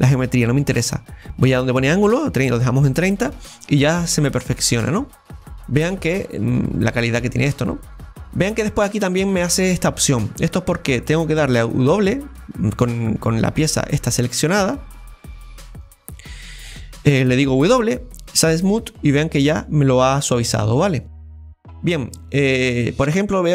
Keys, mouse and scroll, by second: 1.8 click, 4.0-5.8 middle drag, 5.8-6.5 scroll up 6, 6.5 scroll down 2, 6.8-8.1 middle drag, 8.1-8.4 scroll down 1, 8.4 scroll up 2, 8.6-10.3 middle drag, 10.3-11.1 scroll down 1, 11.1-13.3 scroll down 1, 13.3-17.7 right drag, 13.3 scroll down 3, 18.9 middle click, 19.5 scroll up 4, 20.7 scroll up 1, 21.1-23.5 middle drag.